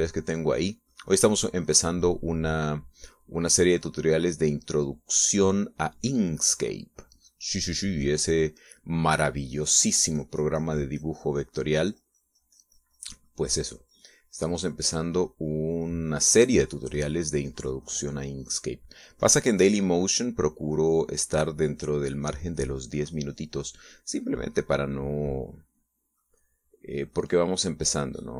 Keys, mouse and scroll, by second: 10.4-19.8 drag, 20.0-22.1 drag.